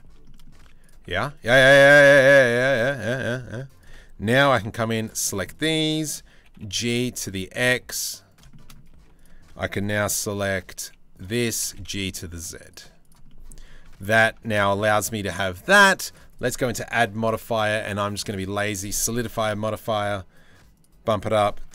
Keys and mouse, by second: 0.0-3.1 typing, 4.2 c, 5.1 shift+middle click, 6.0 g, 8.6 1, 10.4 c, 11.2 g, 12.4 z, 12.9 middle click, 13.5 Tab, 13.6 middle click, 14.0 Tab, 14.2 shift+middle click, 15.3 Tab, 15.7 click, 15.9-18.0 drag, 18.3 click, 18.5-19.1 middle drag, 20.4 click.